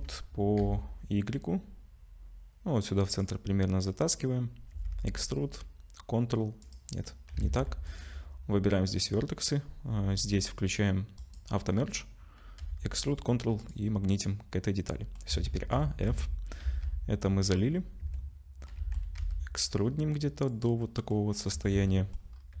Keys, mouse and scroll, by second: 4.7 e, 7.4 ctrl+z, 7.9 click, 11.2 click, 12.6 e, 14.1 middle click, 15.3 a, 15.7 f, 16.1 Tab, 16.6 z, 17.2 middle click, 17.7-18.3 scroll up 3, 18.0 Tab, 18.7 middle click, 19.2 e, 20.8 middle click, 21.5 Tab, 21.9 middle click, 22.3-22.6 scroll up 3.